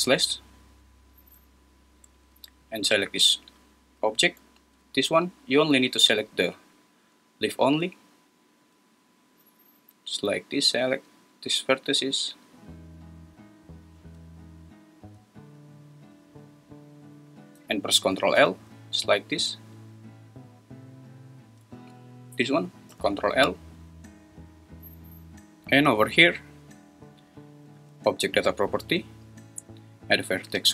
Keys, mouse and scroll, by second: 10.4 shift+click.